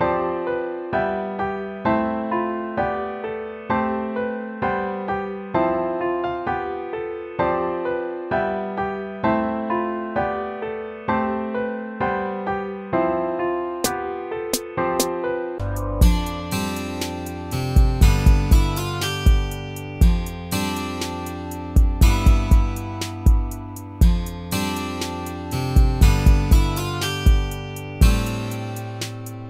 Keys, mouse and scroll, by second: 0.2 ctrl+z, 1.4 ctrl+c, 1.9 ctrl+v, 2.6 ctrl+v, 2.9 ctrl+v, 3.4 ctrl+v, 4.0 ctrl+v, 4.9 ctrl+v, 7.9 BackSpace, 8.8 ctrl+v, 12.6 ctrl++.